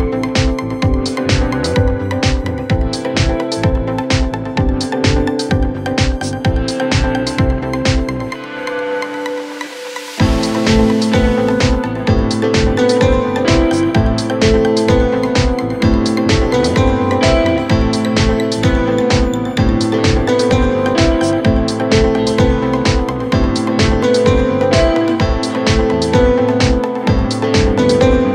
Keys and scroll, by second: 22.8 ctrl+Page_Down, 23.4 F3.